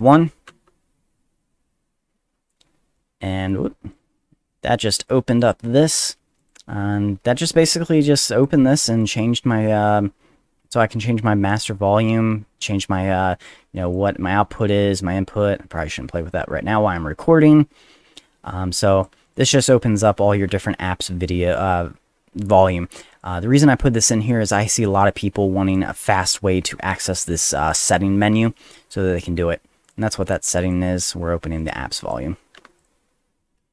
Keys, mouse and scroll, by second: 0.5 F1, 3.9-5.4 drag, 6.4 click, 7.1 F1, 13.8 click, 14.5 click, 16.5-19.0 drag, 19.2 click, 23.1 click, 23.5 middle click, 25.7 click, 29.8 click, 30.5 click, 30.6 click, 31.6 click, 32.8 click.